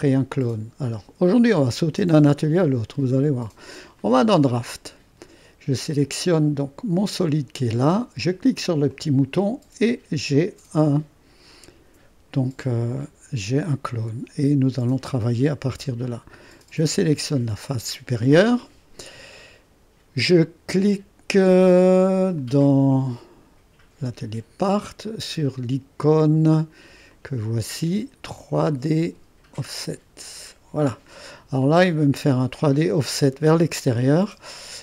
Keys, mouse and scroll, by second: 4.0-5.1 drag, 7.0 click, 8.9 click, 25.0-26.9 drag, 27.1 click, 29.8-31.9 drag, 31.9-34.8 scroll up 1.